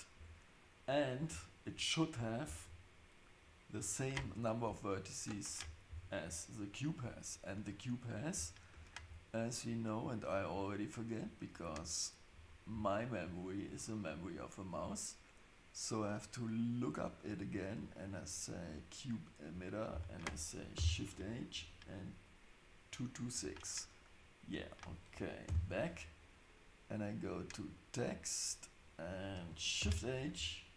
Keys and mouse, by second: 0.1 Tab, 8.7 Tab, 18.3 click, 20.8 shift+h, 25.5 ctrl+z, 27.2 click, 29.8 shift+h.